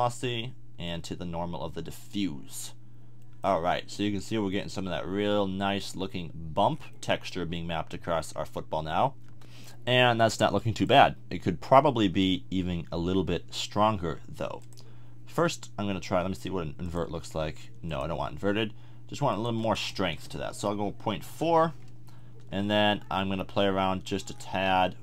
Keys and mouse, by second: 11.2-12.2 middle drag, 16.9 middle click, 20.3 BackSpace.